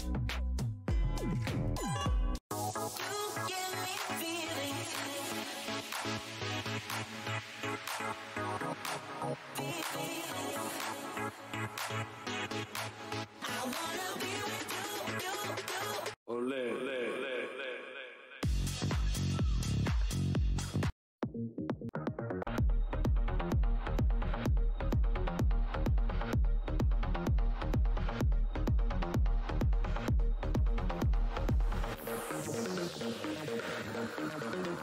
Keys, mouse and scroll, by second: 0.4-1.1 scroll down 1, 2.3 click, 2.6-3.2 scroll down 1, 3.2 Tab, 5.6 click, 6.5 Tab, 8.0 alt+Tab, 11.0 scroll down 1, 12.0 Tab, 12.2-12.7 scroll down 1, 12.9 Tab, 13.3-13.7 scroll down 1, 14.0 Tab, 14.1-14.7 scroll down 1, 15.4-15.7 scroll down 1, 19.2-19.8 scroll down 1, 20.8 click, 21.9 click, 22.4 click, 24.8 click, 27.0 alt+click, 27.4 alt+Tab, 28.1 scroll down 1, 28.9 click, 29.3 Tab, 29.5 alt+click, 29.7 alt+scroll up 1, 30.7 click, 31.1 Tab, 32.1 click, 32.5 Tab, 33.5 space, 34.1 click, 34.3 Tab.